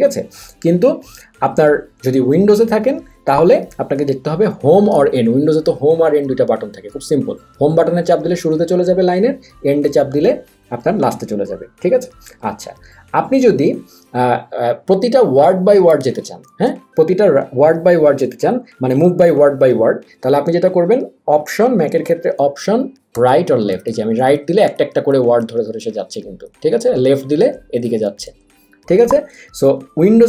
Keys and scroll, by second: 16.6 Left, 23.1 alt+Right, 27.0 alt+Left.